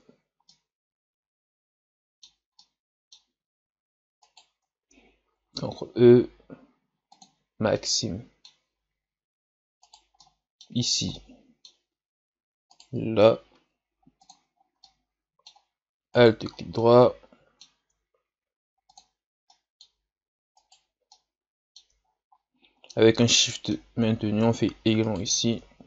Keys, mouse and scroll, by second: 0.5-4.2 middle drag, 4.2 shift+right click, 5.2 ctrl+e, 7.7-8.8 middle drag, 8.8-9.5 scroll up 1, 9.8 right click, 10.2 middle click, 10.8 scroll up 2, 11.1-12.7 middle drag, 12.7 shift+right click, 13.6 ctrl+e, 14.5 scroll down 1, 14.8-16.1 middle drag, 16.1 alt+right click, 16.5 scroll down 1, 16.7-18.2 middle drag, 18.2 ctrl+e, 19.5-20.6 middle drag, 20.6 alt+right click, 21.2 middle click, 22.0 scroll down 4, 22.3-22.9 scroll up 2, 23.3 middle click, 23.9 scroll up 3, 25.1 alt+shift+right click.